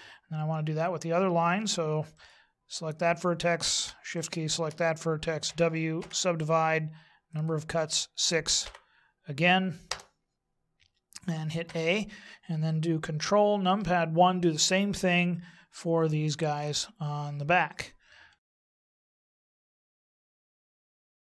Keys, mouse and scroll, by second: 2.1 right click, 4.1 shift+right click, 5.4 w, 7.3 click, 11.6 a, 13.7 ctrl+KP_1, 16.4 ctrl+KP_1, 18.6 right click, 19.1 shift+right click, 19.4 w, 19.7 click, 20.8 a, 20.8 right click.